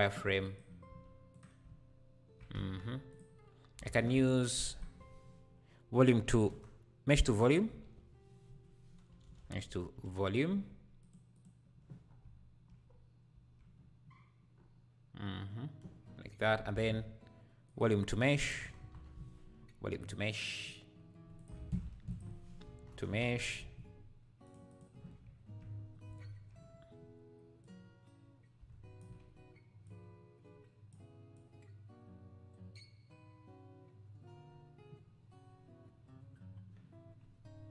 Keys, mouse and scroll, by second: 0.2 q, 0.6 q, 2.5 q, 3.1 q, 3.8 shift+a, 9.2 BackSpace, 11.1 BackSpace, 12.1 scroll down 2, 12.2 `, 12.8-13.3 scroll up 1, 13.3 `, 14.5-15.8 scroll up 2, 15.8 scroll up 1, 16.0 scroll down 1, 16.7 shift+a, 21.3 click, 21.6 ctrl+x, 21.9 shift+a, 25.8 scroll up 3, 27.6-34.4 drag.